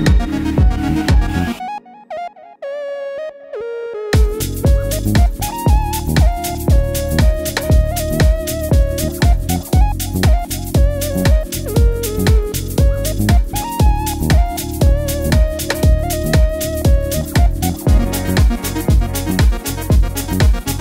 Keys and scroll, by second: 0.1 typing, 1.8-2.3 typing.